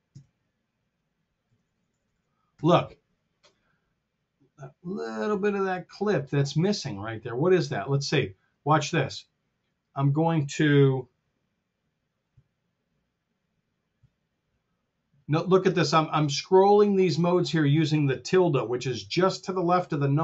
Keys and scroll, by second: 0.0 Tab, 1.3 t, 12.2 Escape, 13.9 `.